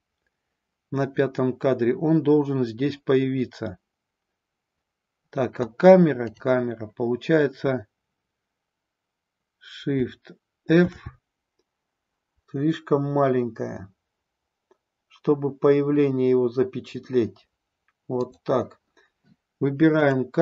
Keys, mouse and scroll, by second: 6.2 click, 10.9 shift+f, 12.8-18.1 Down, 18.1 click, 18.3 Down, 20.1 click.